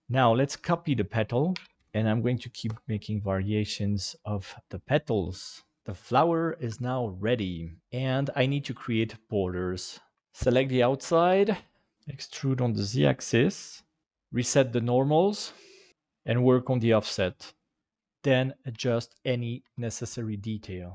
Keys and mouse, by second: 1.5 shift+d, 1.7 ctrl+z, 1.7 click, 10.5 ctrl+i, 11.3 Delete, 11.9 e, 14.0 alt+n, 14.7 middle click, 15.9 click, 17.8 middle click, 18.7 KP_7, 19.6 g.